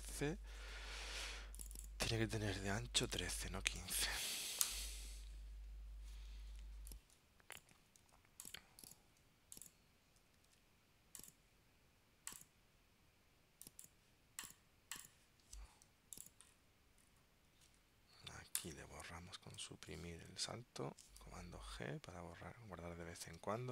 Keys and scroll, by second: 0.0 super+Tab, 8.2 super+x, 10.6 super+v, 21.5 super+g, 23.4 super+Tab.